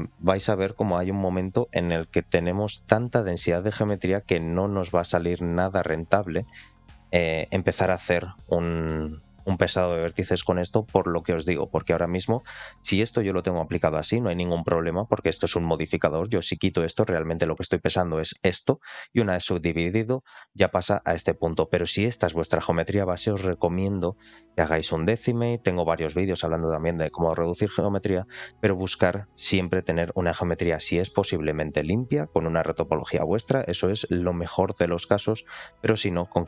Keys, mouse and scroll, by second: 0.7 click, 3.5 click, 3.9-5.5 drag, 16.4 click, 20.2 click, 23.7 click, 24.8 click, 27.8 click, 28.9 click, 35.6 click.